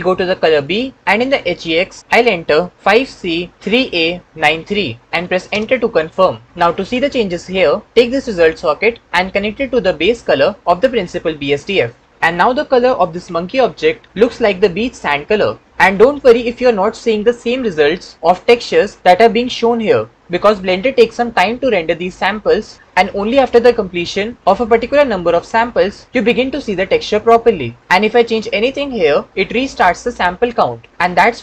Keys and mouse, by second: 0.5 click, 9.0-11.4 drag.